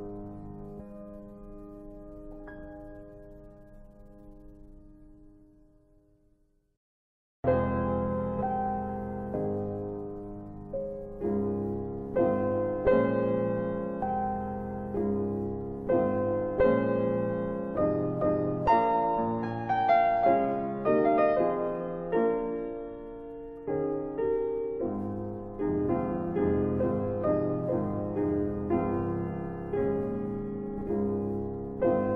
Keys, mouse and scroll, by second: 0.1 alt+middle click, 1.4 scroll up 1, 1.9 scroll down 1, 6.1 click, 9.1 click, 13.3 click, 14.3 shift+click, 18.0 click, 26.4 click, 28.2 alt+w, 29.6 click, 31.7 click.